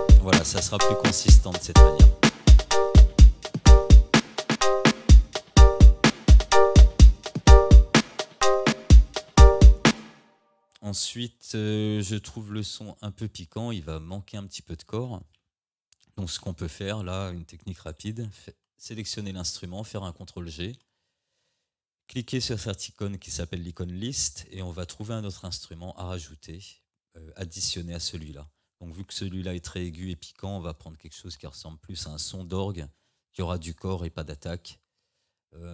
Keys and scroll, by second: 9.9 space, 20.2 ctrl+g.